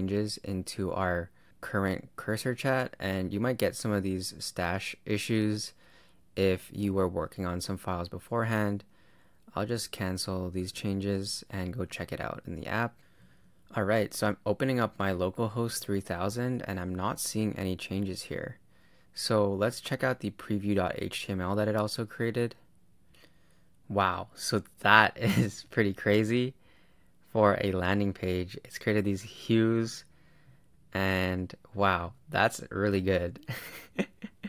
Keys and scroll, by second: 1.6 super+Return, 10.6 super+Tab, 12.0 super+r, 13.1 super+Tab, 14.9 super+r, 16.8 super+Tab.